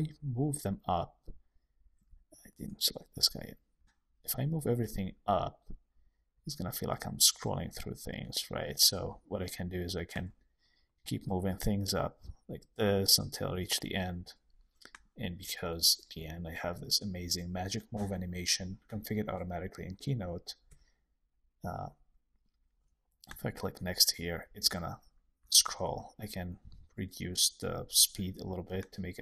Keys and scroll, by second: 2.1 super+z, 20.6 Right, 25.3 shift+Left, 25.8 Escape.